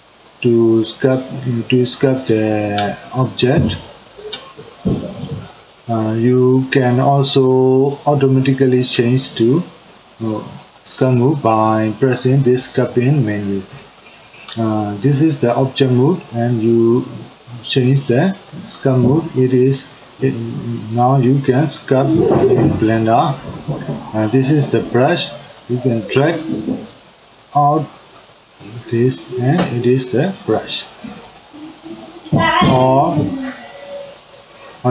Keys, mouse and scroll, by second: 15.8-20.0 drag, 22.1-26.0 drag, 27.0-30.9 drag, 33.4-34.9 drag.